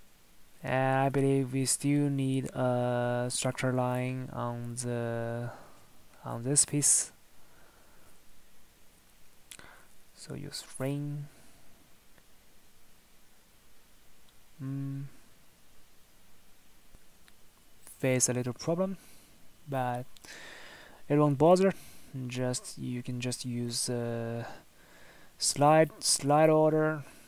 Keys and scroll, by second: 3.4 Escape, 7.3 Escape, 9.0 Escape.